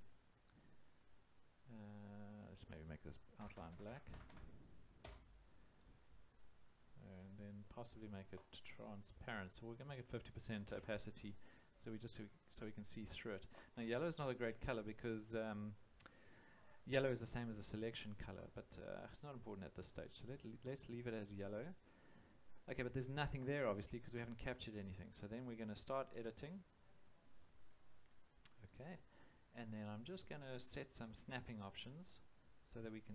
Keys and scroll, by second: 3.4 0, 5.0 Return, 10.6 5, 11.1 0.